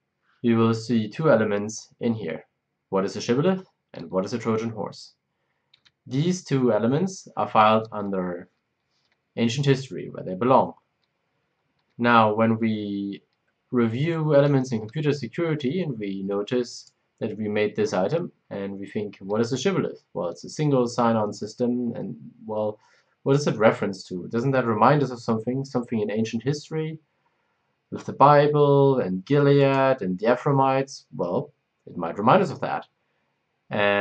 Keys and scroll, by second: 5.7 Escape.